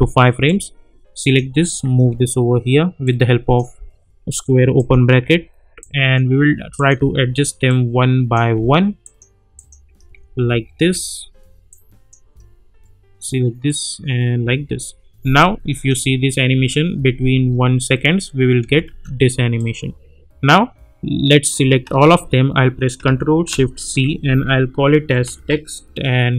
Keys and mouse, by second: 2.1 [, 3.0-3.6 drag, 5.1 [, 5.8-6.4 click, 7.0 [, 7.6-8.6 drag, 9.8 [, 10.2 -, 10.5 -, 10.8 -, 11.7-12.3 drag, 14.4 [, 15.4-16.0 click, 15.9 space, 19.6-21.4 drag, 21.8 ctrl+a, 23.8 ctrl+shift+c, 24.7-26.0 typing.